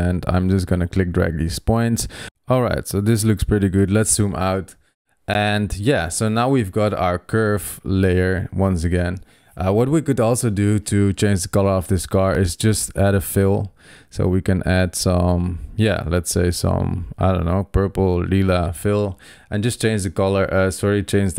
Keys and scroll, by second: 3.8 super+0.